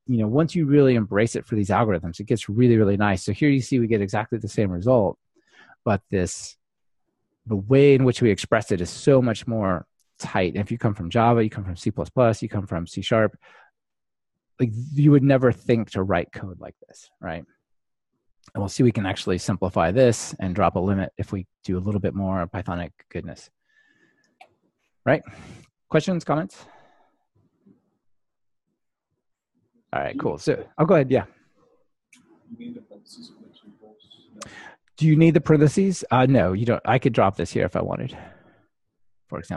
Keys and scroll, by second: 2.6 ctrl+r, 37.6 Delete.